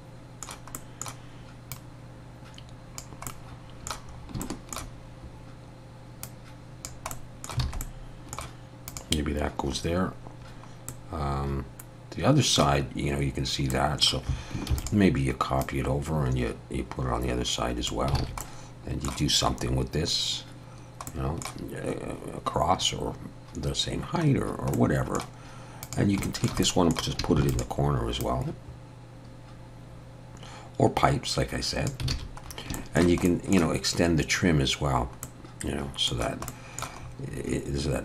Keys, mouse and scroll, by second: 0.8 middle click, 1.7 click, 3.3 middle click, 4.2 scroll up 2, 4.4 shift+middle click, 6.2 click, 7.1 middle click, 7.7 alt+a, 7.8 middle click, 8.9 click, 10.9 middle click, 13.7 middle click, 14.7 shift+d, 15.6 click, 18.2 alt+a, 18.4 middle click, 19.7-20.1 scroll up 2, 20.7 scroll down 1, 21.1 middle click, 24.3-24.7 scroll down 1, 24.8 middle click, 25.9 click, 26.2 shift+middle click, 26.6 middle click, 27.4 shift+d, 28.2 click, 32.1 alt+a, 32.5 scroll up 2, 32.7 shift+middle click, 33.3 middle click, 34.6 scroll down 1, 35.2 middle click, 36.5 middle click, 37.0-37.6 scroll up 2.